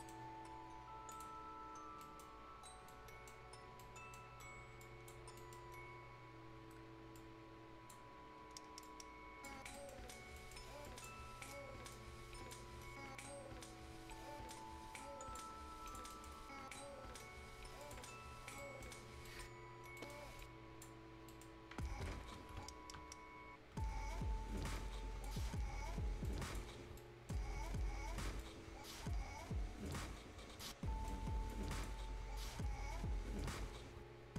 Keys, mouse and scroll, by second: 1.0 click, 1.3 scroll down 1, 1.9 right click, 2.4 scroll up 1, 2.8 right click, 3.3-3.7 scroll up 1, 3.7 right click, 4.2-4.8 scroll up 1, 4.8 click, 5.3 right click, 7.1-9.6 drag, 9.6 scroll down 1, 9.8 right click, 10.1 scroll up 1, 10.4 right click, 10.9 click, 11.3-11.9 scroll up 1, 11.9 click, 12.8-14.3 scroll up 1, 14.5 click, 15.6 scroll down 1, 15.9 click, 16.1 right click, 17.8 click, 18.1-18.6 scroll down 1, 18.6 right click, 19.0 scroll up 1, 19.3 right click, 19.6-20.0 scroll up 1, 20.0 right click, 20.4 click, 20.4 click, 21.0 scroll up 1, 21.3 right click, 24.1-24.8 scroll up 1, 24.8-27.0 drag, 27.0-28.4 right drag, 28.4-30.1 drag, 30.1 scroll down 1, 30.4 scroll up 1, 30.6 right click, 31.2 scroll up 1, 31.5 click, 32.0 scroll up 1.